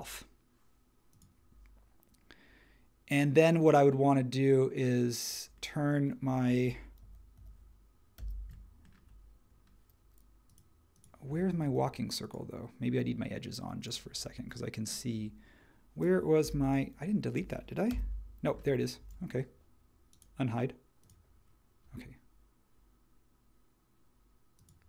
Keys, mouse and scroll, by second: 6.4-8.2 typing, 16.4 n, 17.4 space, 17.9 n.